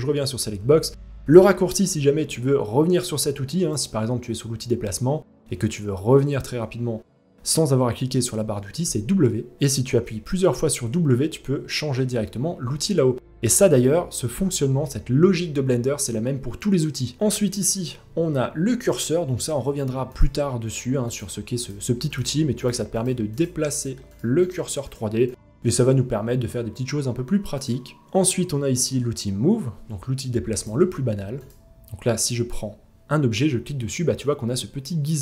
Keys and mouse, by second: 8.4 w, 9.5-12.2 typing, 17.2 w, 20.7 click, 21.2-22.3 drag, 22.6 click, 22.9 click, 23.3 click, 23.7-24.1 drag, 24.5-27.2 drag.